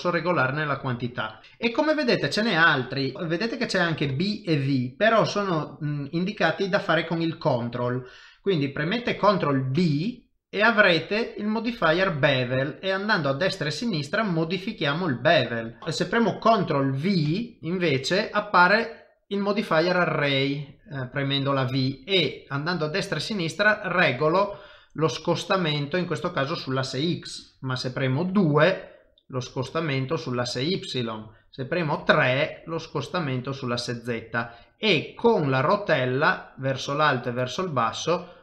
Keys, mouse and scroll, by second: 37.9 scroll down 1.